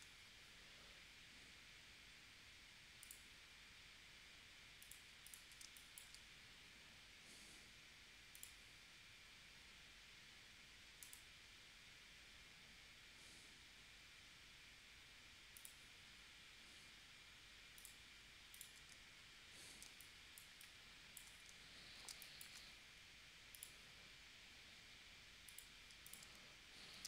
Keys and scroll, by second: 5.6 space, 19.9 space, 22.1 space.